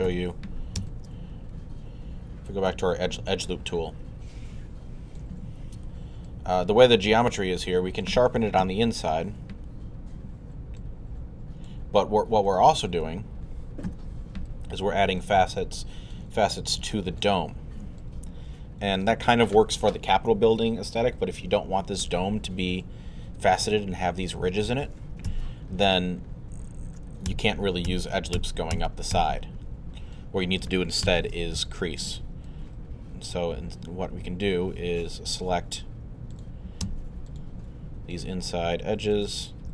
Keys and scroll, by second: 0.1 i, 0.8 shift+i, 8.6 2, 13.9 alt+3, 25.3 z, 27.3 alt+z, 27.9 z, 30.0 alt+z, 31.1 alt+w.